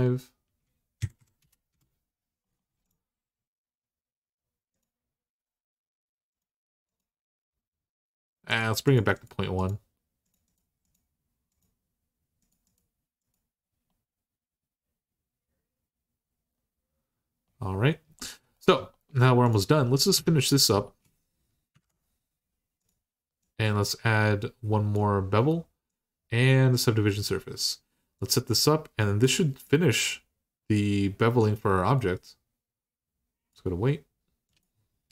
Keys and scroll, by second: 0.8 Left, 1.0 Left, 1.2 BackSpace, 1.5 Return, 19.9 Tab, 21.6 alt+h, 34.9-35.1 typing.